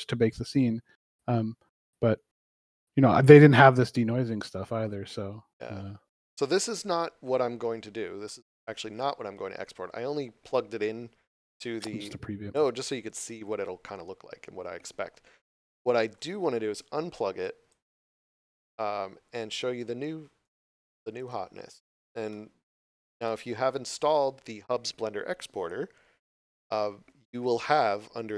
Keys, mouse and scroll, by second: 0.4 scroll down 1, 5.3 scroll down 1, 7.8 scroll down 1, 8.2 shift+middle click, 12.4 click, 17.4 click, 19.3 right click, 21.6 scroll up 1, 22.8 scroll up 1, 23.2 shift+middle click, 23.7 scroll up 1.